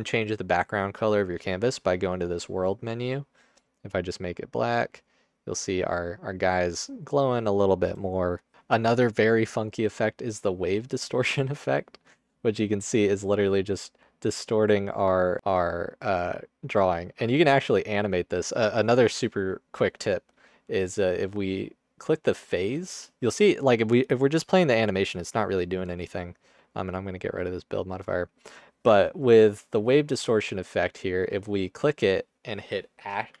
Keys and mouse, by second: 1.6-2.8 middle drag, 8.5 click, 11.9 alt+click, 12.7-14.0 drag, 14.8-17.1 drag, 18.0 click, 22.6 space, 22.9 space, 23.4 space, 25.9 drag, 26.9 drag, 29.9 alt+click, 31.6-33.4 drag.